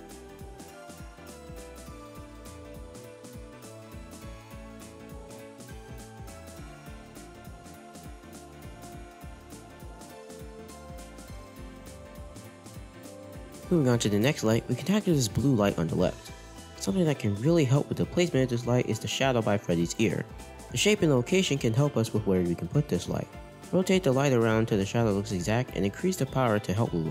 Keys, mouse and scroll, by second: 2.2-2.8 scroll down 3, 2.8-3.5 scroll up 4, 4.0 scroll up 1, 4.6-5.0 scroll up 1, 5.0 r, 8.7 scroll down 4, 9.4-10.3 scroll up 4, 10.8-13.8 drag, 13.2-13.6 scroll down 2, 13.3 middle click, 13.7 shift+a, 15.9 shift+a, 16.9-17.4 scroll up 4, 18.2-20.4 shift+middle drag, 24.0 r.